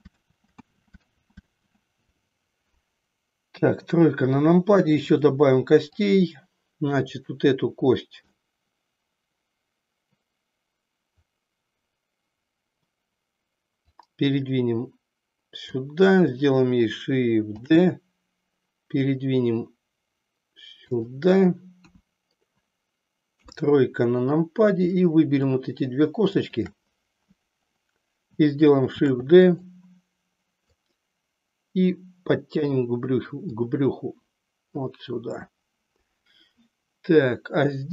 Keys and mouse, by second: 0.4 ctrl+z, 3.5 KP_3, 5.0-6.1 drag, 7.1 click, 8.5-12.8 middle drag, 13.8-15.7 drag, 17.6 shift+d, 21.0 click, 21.9 KP_1, 23.2 KP_3, 26.4 shift+click, 29.0 shift+d, 29.5 click, 30.7-32.8 drag, 33.5-34.9 drag.